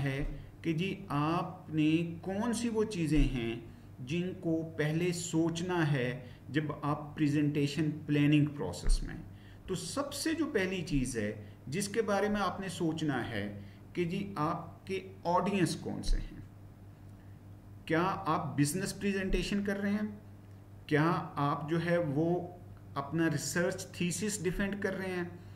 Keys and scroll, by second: 12.3 Down.